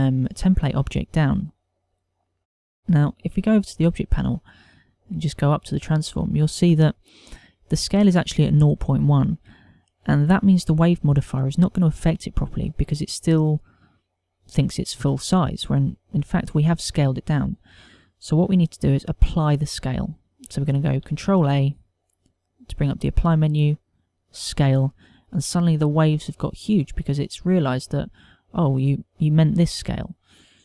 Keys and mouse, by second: 4.5 click, 5.7 click, 22.0 ctrl+a, 28.4 middle click.